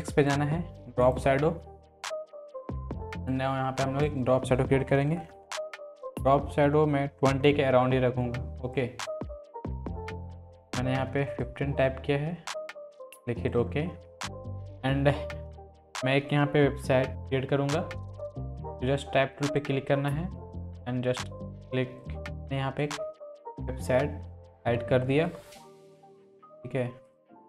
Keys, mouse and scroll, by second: 0.2-3.3 drag, 8.7-9.4 drag, 11.4-12.0 drag, 17.1 click, 22.0-24.3 drag, 24.6 ctrl+t, 25.4-26.3 drag, 27.0 click.